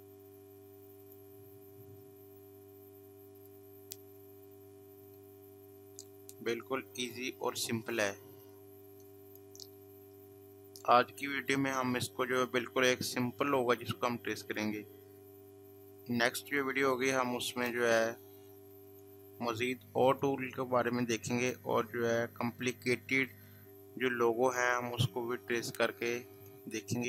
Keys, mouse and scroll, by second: 1.0 click, 3.4 click, 8.2 space, 8.4 click, 8.7 space, 11.1 space, 14.4 click, 18.9 click, 22.5 click, 23.3 space, 23.5 click, 23.8 space, 26.3 click.